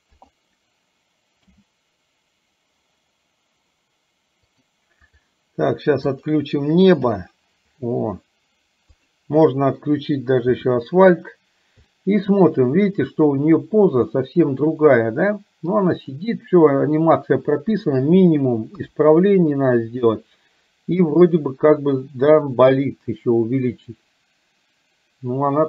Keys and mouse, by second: 0.3 click, 1.5 h, 4.5-5.5 drag, 6.2 click, 9.0 click, 12.0 middle click, 14.2 middle click, 16.0 click, 18.8 KP_3.